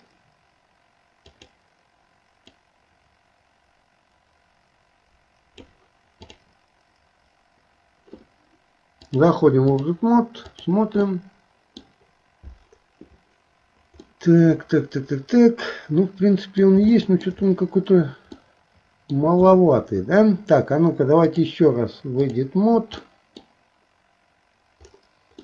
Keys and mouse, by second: 9.2 click, 10.5 click, 11.0 middle click, 14.1 middle click, 15.1-16.6 middle drag, 17.0 shift+middle click, 18.4 middle click, 21.4-22.5 drag, 23.1 middle click.